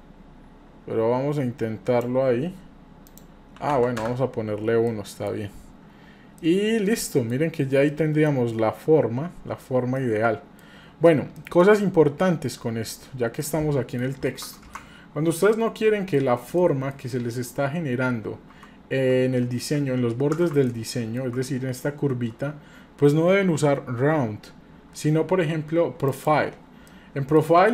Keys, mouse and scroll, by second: 3.1 click, 4.9 middle click, 5.4 scroll up 1, 5.9-6.4 scroll down 2, 6.4-7.3 middle drag, 7.4 scroll up 3, 7.9 middle click, 9.5 scroll down 1, 10.0 middle click, 11.3 scroll down 1, 11.4-12.5 middle drag, 12.9 scroll up 1, 13.4 middle click, 14.7-16.2 shift+middle drag, 16.6 shift+middle click, 17.4-17.8 scroll up 1, 17.8 scroll down 1, 20.7 ctrl+middle click, 21.3-22.1 middle drag, 26.1 click, 26.9-27.4 shift+middle drag.